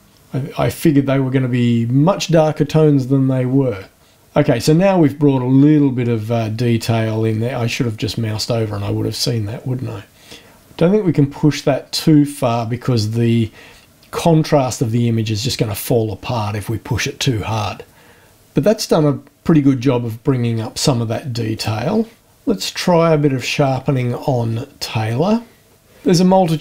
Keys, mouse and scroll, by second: 21.5 click, 24.5 scroll down 2.